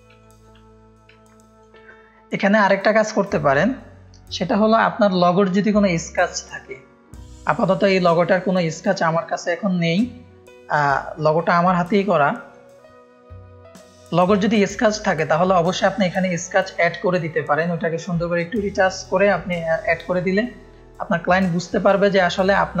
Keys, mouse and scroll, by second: 0.2 click, 0.2 space, 1.6 space, 10.8-11.6 drag, 12.4 click.